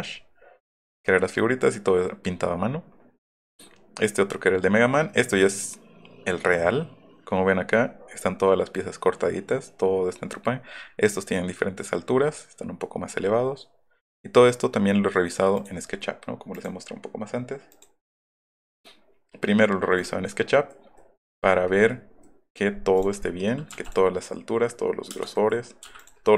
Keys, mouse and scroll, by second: 16.5 click, 17.7 click, 21.0-22.3 middle drag, 23.8 m, 25.4 middle click, 25.9 m, 26.0 click.